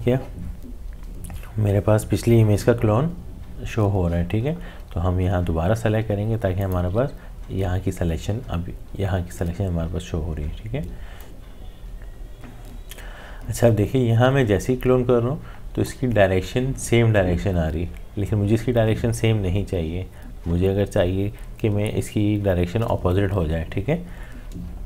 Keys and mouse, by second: 6.0 typing, 6.6 alt+click, 11.2-18.1 drag.